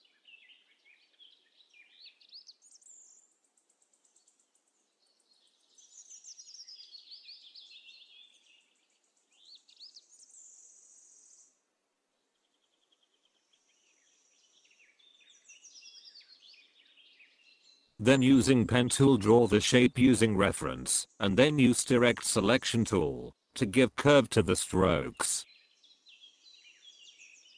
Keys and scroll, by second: 17.5 space.